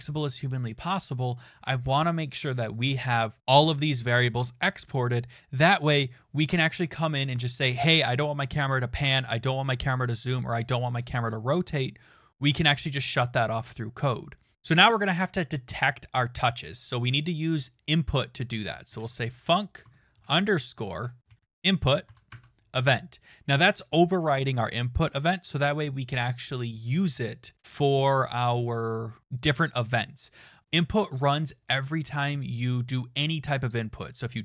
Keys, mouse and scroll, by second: 0.0-0.7 typing, 18.6-22.5 typing, 20.9 shift+click, 22.7 Return.